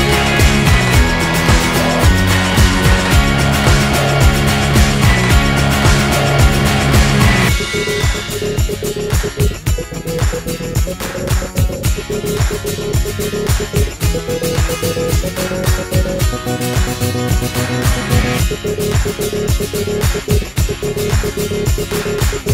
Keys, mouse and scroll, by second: 0.2 a, 1.4-2.7 drag, 3.5-5.7 right drag, 5.4 alt+m, 7.4 middle click, 7.6 a, 7.7 ctrl+click, 8.0 right click, 8.1 alt+m, 8.2 a, 8.3 click, 8.6 alt+m, 8.9 a, 8.9 click, 9.3 click, 9.7 alt+m, 11.0 z, 13.3 Tab, 15.4 middle click, 16.4 h, 17.3 shift+a, 20.0-22.5 drag.